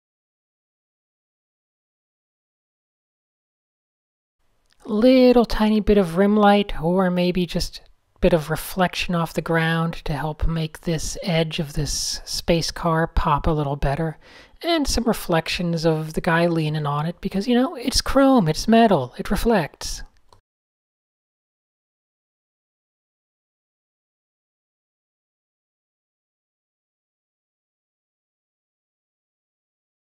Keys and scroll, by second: 0.6 Tab, 1.3-2.3 typing, 1.6 super+h, 2.3 Tab, 3.6 Tab, 3.9 n, 4.5 super+z, 5.3 a, 6.1 shift+super+a, 7.0 super+space, 7.2 super+a, 9.0 shift+super+a, 9.7 super+z, 10.3 super+0, 10.8 super+space, 11.1 Tab, 11.7 n, 14.9 super+z, 15.6 super+0, 15.9 super+z, 16.1 super+space, 16.9 super+0, 18.5 super+space, 18.6 super+space, 18.8 super+a, 19.7 shift+super+[, 20.0 super+h, 20.6 super+[, 20.6 super+[, 20.7 super+[, 20.8-21.5 typing, 21.1 shift+super+a, 21.2 super+1, 25.3 Tab, 26.3-28.3 typing, 29.5 super+z, 29.9 super+z.